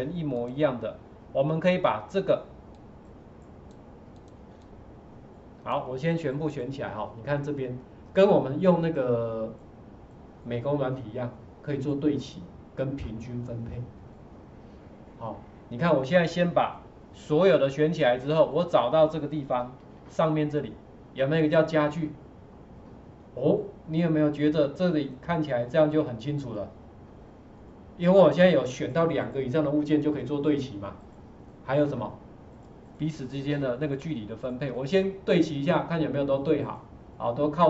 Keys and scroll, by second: 19.8 ctrl+4.